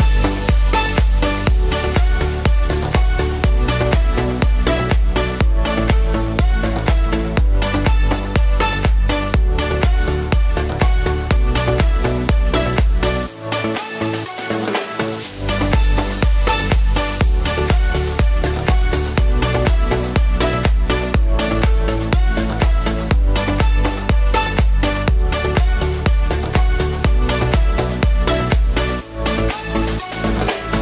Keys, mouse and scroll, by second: 6.2 ctrl+z, 6.5 ctrl+z.